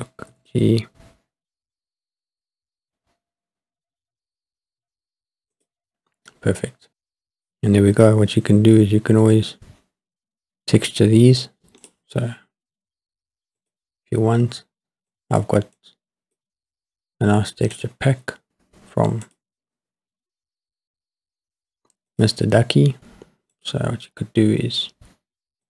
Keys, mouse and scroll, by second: 0.3 g, 5.6-6.1 drag, 11.8 click, 13.7 click, 15.1 click, 15.8 click, 17.7 click, 19.2 click, 22.1-23.3 drag, 23.5-25.6 drag.